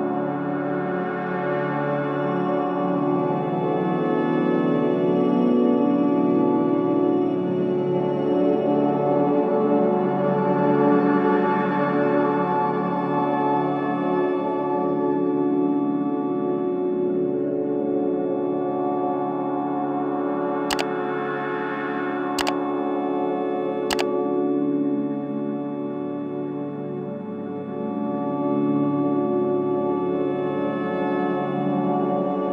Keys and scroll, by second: 23.0 space, 29.3 space.